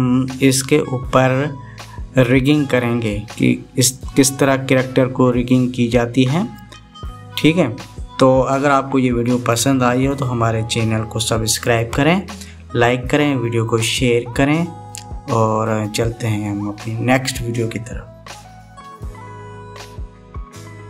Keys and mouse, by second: 20.2 middle click, 20.3-20.8 drag, 20.3-20.8 right drag.